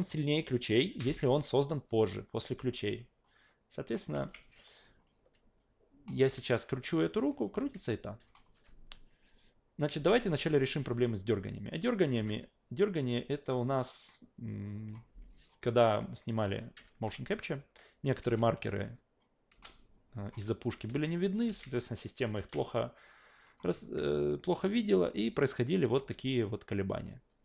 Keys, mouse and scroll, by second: 3.0 alt+middle click, 3.9 alt+middle click, 4.1 alt+v, 4.4 alt+right click, 4.8 alt+middle click, 6.1 click, 6.8-7.4 drag, 7.6 ctrl+z, 8.3 alt+middle drag, 11.8 click, 12.1 f, 12.8 click, 13.9-14.9 drag, 15.3 alt+middle click, 17.3 alt+middle click, 18.2 alt+v, 18.9 alt+drag, 19.5 alt+v, 20.1 alt+right click, 20.8 alt+middle drag, 21.2 alt+drag, 21.5 alt+v, 21.7 alt+middle drag, 22.1 alt+right click, 22.3 alt+v, 22.6 alt+middle drag, 22.9 alt+right click, 25.7 click, 26.0 f, 27.0 click.